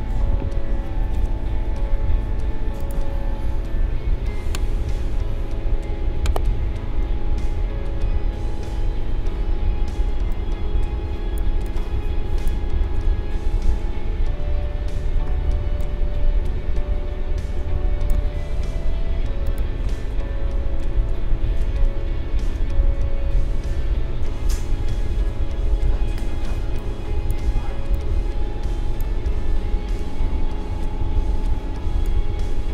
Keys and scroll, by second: 7.1 ctrl+-, 10.1 space, 26.3 space.